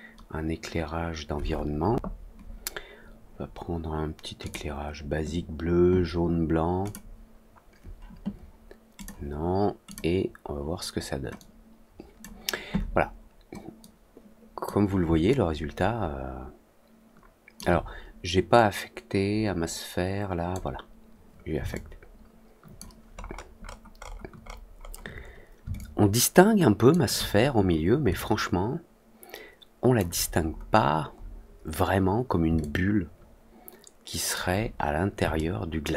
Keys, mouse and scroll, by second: 4.4 click, 6.8 click, 8.9 click, 9.8 click, 11.3 click, 13.7 click, 15.2-17.5 alt+drag, 18.5-20.4 drag, 21.6-22.7 alt+drag, 23.1 alt+middle click, 23.6 alt+middle drag, 23.9 alt+middle click, 25.7-26.8 alt+drag, 28.1-29.9 alt+drag, 30.8 middle click, 31.1 middle click, 32.5-34.3 alt+drag, 35.3-35.9 alt+middle drag.